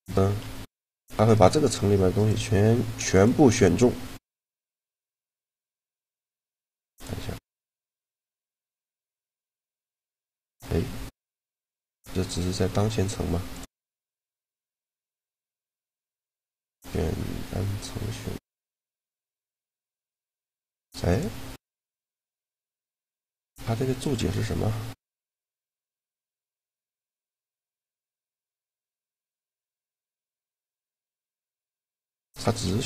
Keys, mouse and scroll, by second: 0.2 g, 1.9 right click, 2.9-5.1 drag, 2.9 right click, 4.7 g, 6.2-7.3 right drag, 7.3 middle click, 8.2-10.0 drag, 10.5-11.9 middle drag, 11.2 g, 13.2-15.4 drag, 14.3 a, 14.7 a, 15.4 right click, 15.9 click, 16.7 click, 20.9-23.1 drag, 30.3-31.9 middle drag, 31.9-32.8 drag, 32.6-32.8 middle drag.